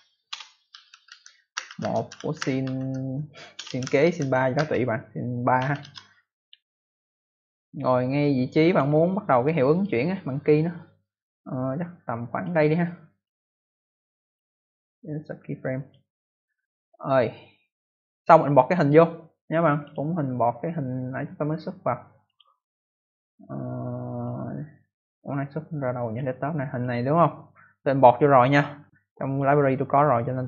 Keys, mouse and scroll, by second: 0.0-5.5 typing, 5.7 Return, 7.4 click, 9.6 click, 9.7 click, 10.9 click, 13.0 click, 13.2 click, 13.6 right click, 14.2 click, 14.5 right click, 14.7 double right click, 15.7 click, 18.7 click, 19.8 click, 22.2 click, 23.5 scroll up 1, 24.1 click, 26.0 click, 26.7 click, 29.2 click.